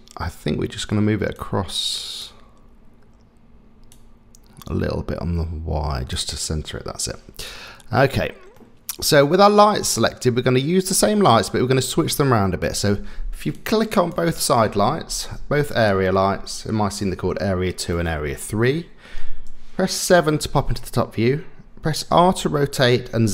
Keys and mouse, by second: 1.4 click, 3.9-6.1 drag, 8.6 middle click, 9.6 middle click, 11.3 click, 12.6 click, 13.5 click, 15.8 shift+click, 17.9 middle click, 20.1 KP_7, 22.1 r.